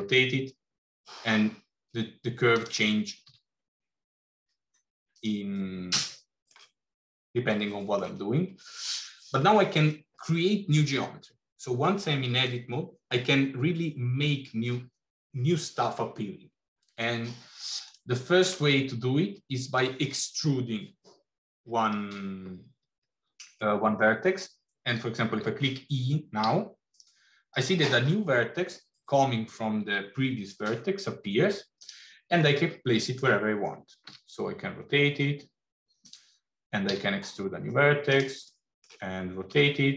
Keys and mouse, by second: 3.1 s, 5.6 middle click, 7.4 middle click, 18.0 middle click, 26.4 e, 32.6 middle click, 34.0 r, 36.8 e, 38.6 middle click.